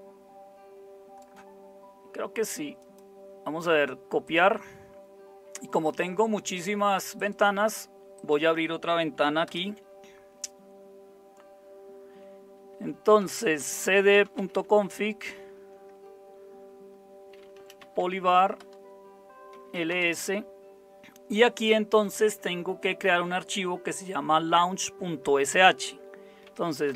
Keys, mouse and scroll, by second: 9.5 super+Return, 13.0-15.5 typing, 17.2-20.2 typing, 26.2-26.9 typing.